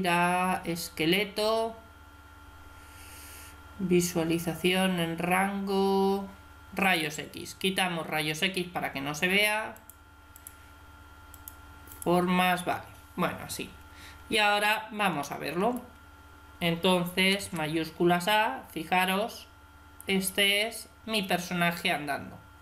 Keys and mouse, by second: 6.7-8.4 drag, 8.4-9.6 middle drag, 9.6-13.5 drag, 13.5-15.1 middle drag, 17.2 alt+a, 21.0 Escape, 21.8-22.6 middle drag.